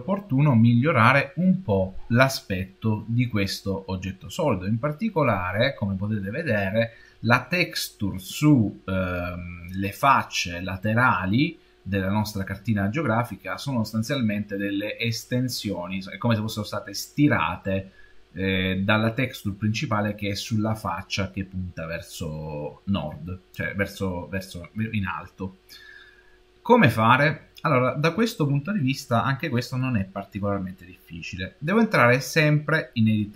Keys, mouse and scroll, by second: 28.7 shift+middle click.